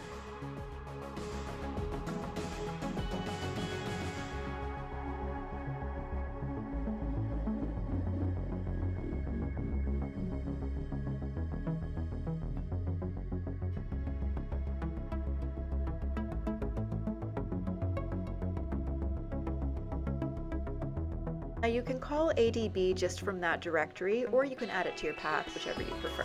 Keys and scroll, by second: 0.7 Return, 5.4-5.8 typing, 7.0-9.0 typing, 10.3-13.0 typing, 14.0 typing, 16.2 typing, 21.4-22.3 typing, 24.6-26.2 typing.